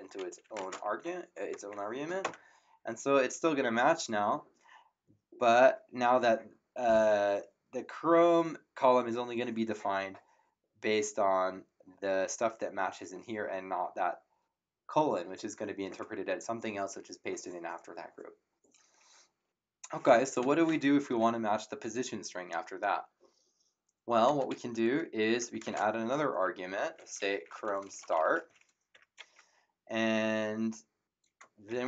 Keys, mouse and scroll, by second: 0.0-1.5 typing, 2.2 Return, 20.4 Up, 24.2 BackSpace, 25.5 <, 25.6 space, 25.6 ,, 27.1-28.9 typing, 31.6 shift+'.